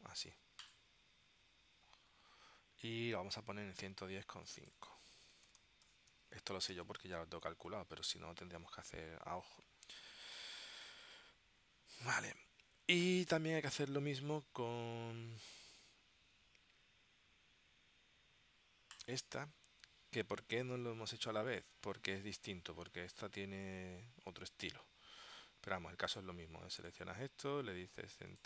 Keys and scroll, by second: 5.2-6.8 typing.